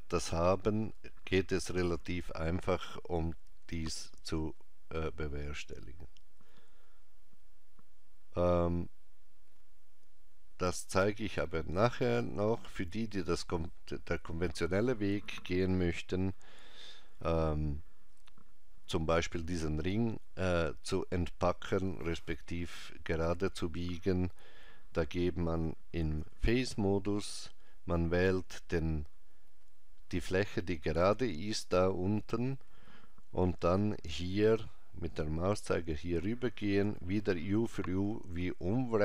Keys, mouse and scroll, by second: 9.9 scroll up 2, 11.4 middle click, 26.0 ctrl+Tab, 31.6 click, 36.8 u.